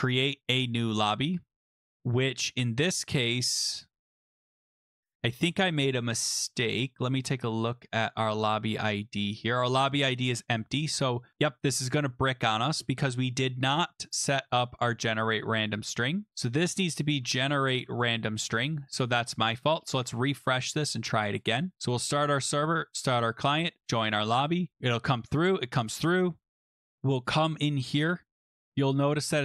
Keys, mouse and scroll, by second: 5.1-5.7 scroll down 3, 5.7-9.1 scroll up 3, 9.5 click, 10.0 scroll, 10.4 click, 11.4-12.6 scroll, 12.6-13.3 scroll, 13.3 scroll, 14.6-16.3 scroll, 16.5 click, 16.5-18.2 typing, 18.4 ctrl+s, 20.1 click, 21.7 click, 21.9 click, 23.0 click, 23.8 click, 24.9 click, 25.6 click, 27.1 click, 27.6 click, 28.1 click, 28.7 click, 29.2 click.